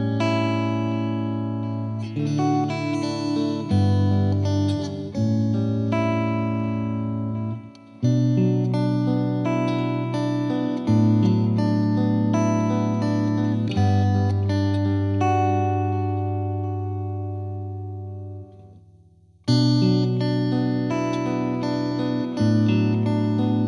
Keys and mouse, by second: 0.3 click, 1.8 click, 2.9 click, 4.1 click, 4.6 click, 5.6 click, 8.4 click, 9.8 click, 10.6 click, 13.8 click, 16.2 click, 20.8 click, 23.3 click.